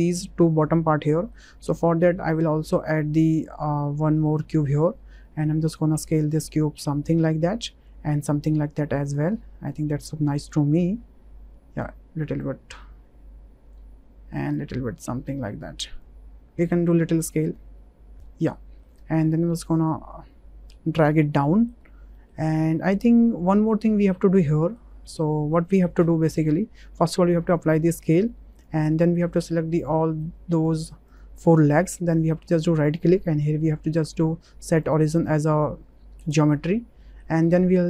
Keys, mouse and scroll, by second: 1.1 click, 1.8 shift+a, 5.3 click, 6.1 click, 7.1 click, 8.4-9.6 drag, 10.5-11.9 drag, 12.4-13.7 drag, 14.6-16.0 drag, 16.6-18.2 drag, 18.5 middle click, 19.2 w, 19.9-21.1 drag, 21.3 click, 22.6 click, 24.6 click, 25.2 click, 26.0 click, 27.0 ctrl+a, 27.9 ctrl+a, 29.4 drag, 30.0 middle drag, 30.7 shift+drag, 31.3 middle click, 32.5-34.2 drag, 34.9-36.4 drag, 37.0-37.5 shift+middle drag.